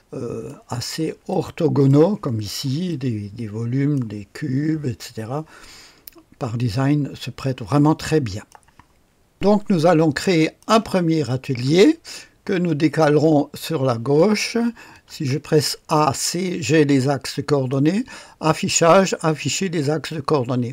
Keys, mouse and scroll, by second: 1.3 click, 2.3 click, 2.9-3.9 drag, 7.9 click, 9.3 click, 10.3 click, 12.2-13.3 scroll down 1, 13.3-14.4 scroll down 1, 14.6-15.5 typing, 17.4 click.